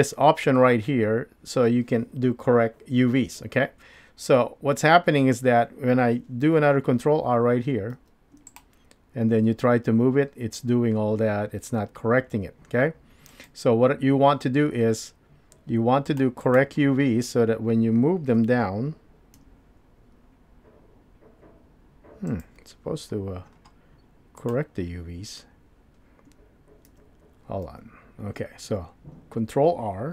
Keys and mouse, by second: 7.9 ctrl+r, 16.1 click, 16.5 click, 18.4 g, 24.4 click, 26.9 ctrl+z, 27.7 ctrl+z.